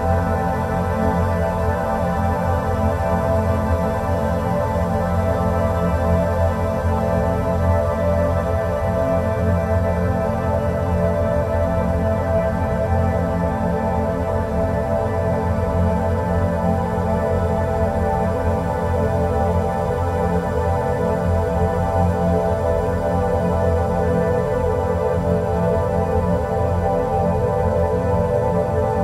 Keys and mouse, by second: 4.3 click, 4.5 click, 7.3-10.1 middle drag, 11.2 click, 12.9 Delete, 14.4 drag, 14.6-21.0 middle drag, 21.4 click, 22.2 Tab, 24.3 drag, 26.5-27.8 drag.